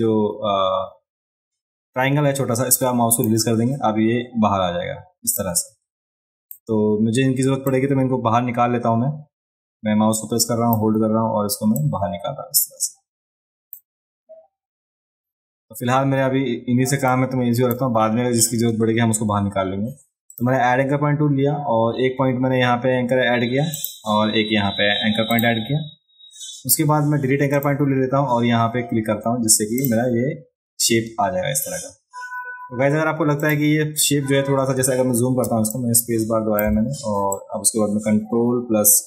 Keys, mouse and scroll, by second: 5.4-6.5 drag, 7.7-10.8 drag, 11.8-13.7 drag, 17.1 click, 17.4 click, 20.3 click, 23.7 click, 25.3 click, 27.5 click, 29.8 click, 33.4 click, 35.5 space, 35.7 click, 37.3-39.0 ctrl+drag.